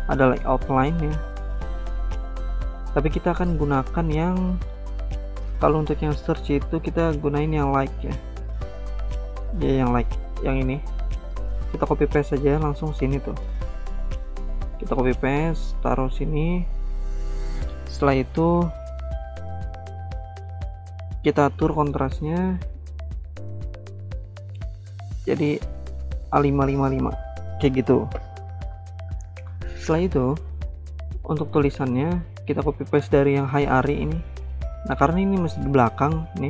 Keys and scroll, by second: 11.6 ctrl+c, 12.7 ctrl+v, 14.7 ctrl+z, 31.7 ctrl+c, 31.8 ctrl+v.